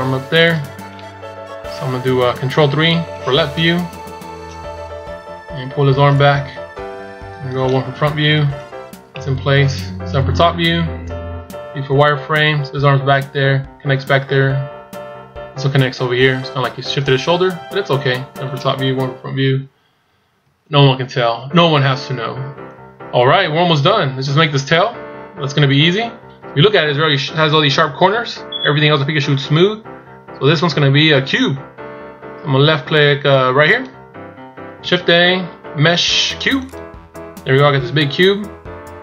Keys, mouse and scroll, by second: 2.5 ctrl+KP_3, 4.8-5.7 scroll up 3, 6.0 click, 7.8 KP_1, 9.0 middle click, 9.9 KP_7, 11.2 z, 11.7 scroll up 2, 18.1-18.9 scroll down 1, 18.9 KP_1, 19.9 scroll down 2, 20.5 shift+scroll up 4, 21.6 shift+scroll down 2, 33.6 click, 34.7 shift+a.